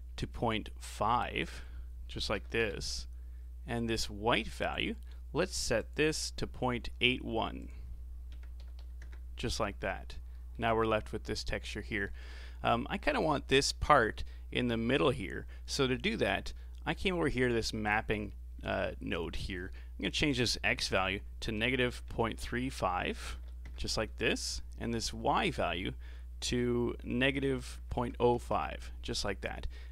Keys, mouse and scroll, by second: 1.4-4.4 drag, 4.6-5.9 drag, 7.6-9.9 drag, 9.9-10.3 scroll up 4, 10.3-13.4 middle drag, 15.9-19.0 middle drag, 20.0-23.1 drag, 25.4 click.